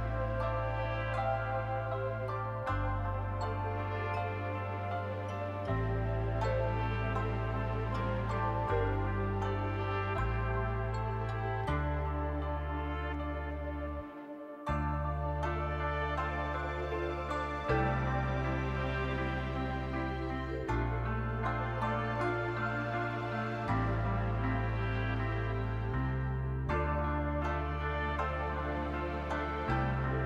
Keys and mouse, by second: 0.0 click, 0.9 click, 1.7 shift+click, 2.8 click, 3.1 click, 4.6 click, 4.8 middle click, 5.8 shift+click, 7.4 click, 7.7 middle click, 8.7 shift+click, 9.5 click, 9.7 click, 9.9 click, 10.2 middle click, 11.4 middle click, 12.1 middle click, 12.6 shift+middle click, 13.4 middle click, 13.7 middle click, 14.1 middle click, 15.3 click, 17.8 click, 18.1 middle click, 19.0 middle click, 21.2 click, 22.3 shift+click, 22.5 click, 23.1 click, 24.5 click, 26.7 click, 28.7 shift+middle click, 29.1 middle click.